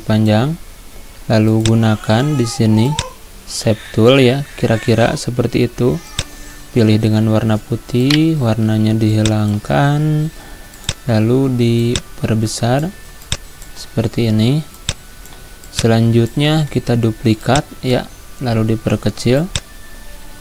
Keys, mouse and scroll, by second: 2.9-6.2 drag, 6.2 click, 8.1 right click, 9.2-13.3 drag, 13.3-14.8 drag, 14.8-17.0 shift+drag, 17.0 ctrl+d, 17.5-20.4 drag.